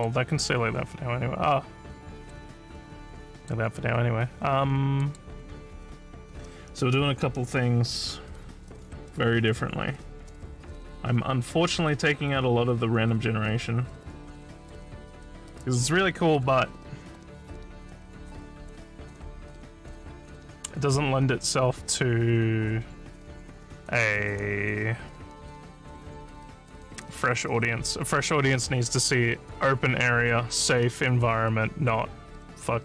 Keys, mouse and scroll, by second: 2.2 click, 3.4 click, 5.1 click.